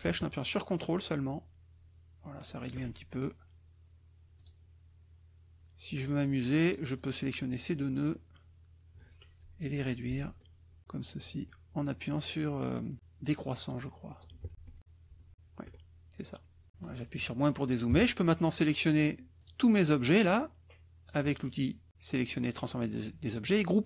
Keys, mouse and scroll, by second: 4.3 click, 6.0 click, 6.9 click, 10.1 <, 11.4 <, 13.7 click, 14.5 shift+<, 15.5 shift+<, 16.7 KP_Subtract, 19.4 click, 20.1-21.2 drag.